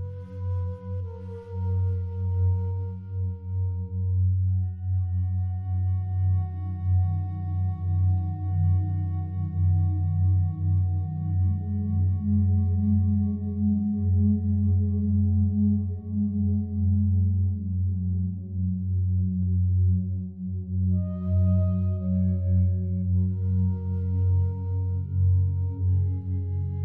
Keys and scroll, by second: 24.5 ctrl+z.